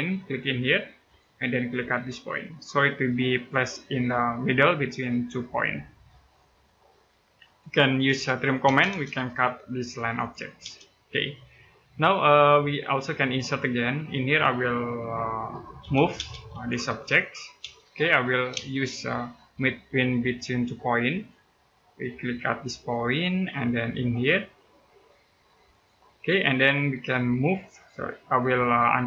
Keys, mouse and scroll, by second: 6.1 middle click, 7.3-7.8 scroll up 1, 7.6-8.4 typing, 9.9 click, 10.4 space, 10.7-11.2 scroll down 1, 11.2 middle click, 13.4-14.9 scroll up 1, 15.6 m, 15.9 space, 16.3 click, 17.4 space, 17.7-18.3 scroll up 1, 18.4 right click, 20.9 click, 21.6-22.9 scroll up 1, 22.9 click, 23.3 scroll down 1, 23.5 middle click, 25.5 click, 26.2-28.5 scroll down 1.